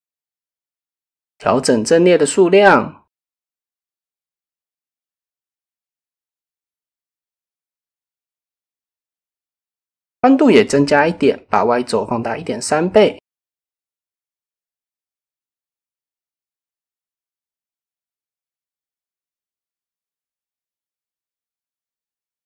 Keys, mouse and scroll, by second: 1.3 middle click, 2.1-3.0 middle drag, 3.5 KP_7, 5.6 shift+middle drag, 8.1 y, 12.1-13.4 drag, 14.8 KP_1, 16.1 shift+middle click, 18.2 click, 18.8 shift+middle click, 20.2 click, 21.3 click, 22.3 click.